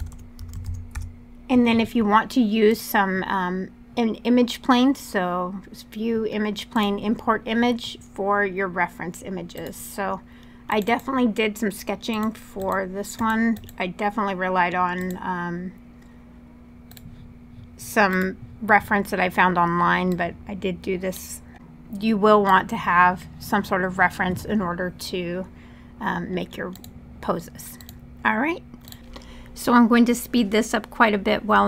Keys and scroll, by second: 0.0-0.9 typing, 21.5 r, 29.6-31.4 typing.